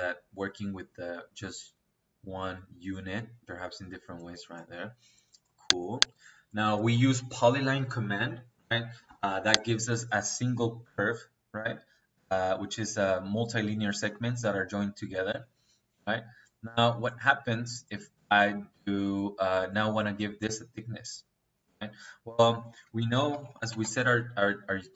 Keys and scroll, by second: 7.9 Escape, 8.8 Escape, 15.2 Escape, 20.3 Escape, 22.6 Escape, 23.0-23.7 typing.